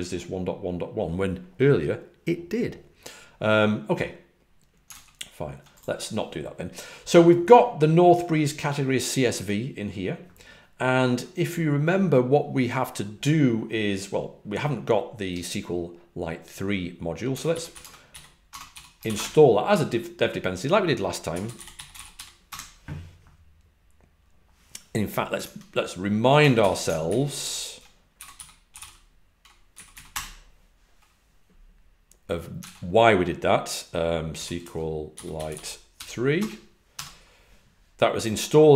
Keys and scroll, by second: 17.4-18.6 typing, 21.1-22.6 typing, 25.3 super+Tab, 26.5 super+n, 27.0 alt+super+Left, 27.3 alt+super+Right, 28.4-30.5 typing, 29.6 Down, 34.8-37.3 typing.